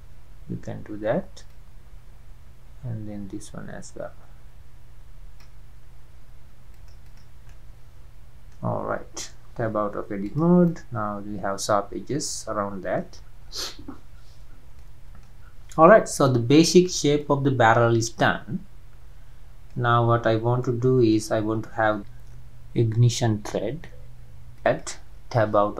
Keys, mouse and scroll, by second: 2.0-4.7 drag, 6.8 click, 7.5 scroll up 1, 7.5-8.8 middle drag, 8.8-9.4 scroll down 3, 9.4-9.7 scroll down 1, 9.7 Tab, 10.2 click, 10.7-13.2 middle drag, 13.2 scroll down 6, 14.1-14.7 scroll down 4, 14.8-15.4 middle drag, 15.4-16.0 scroll up 3, 16.3-16.9 shift+middle drag, 16.9 scroll up 1, 17.2-20.3 middle drag, 20.3-20.6 scroll down 2, 20.6-23.8 middle drag, 24.6 middle click, 24.6 click, 25.3 Tab, 25.5-25.7 scroll up 2.